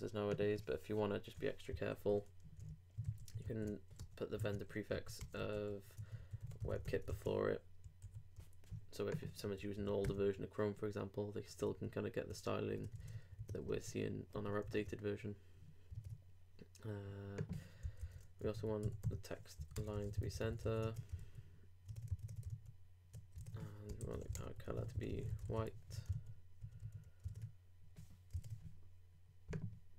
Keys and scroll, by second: 1.9 super+Left, 2.4 super+Right, 3.0 shift+super+Right, 3.0 shift+super+Left, 3.4 shift+super+c, 4.0 super+Return, 4.4 super+z, 4.9 super+Left, 7.1 super+-, 8.0 super+s, 11.7 super+Tab, 13.1 super+Tab, 13.4 super+w, 13.8 super+2, 14.3 super+3, 14.6 super+r, 20.6 super+;, 20.7 super+s, 20.8 super+Tab, 21.2 super+r, 21.9 super+Tab, 22.5 super+r, 23.4 super+Tab, 23.9 super+Return, 25.4 super+;, 25.5 super+s, 25.7 super+Tab, 26.1 super+r, 27.3 super+Tab.